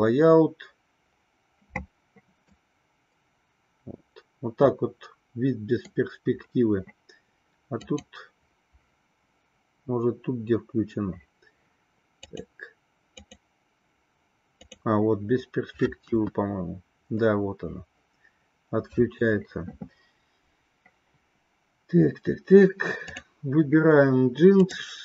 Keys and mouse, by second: 2.7-6.3 middle drag, 7.9-11.2 drag, 12.5 click, 13.5 click, 14.7 click, 16.3 KP_1, 23.2 click.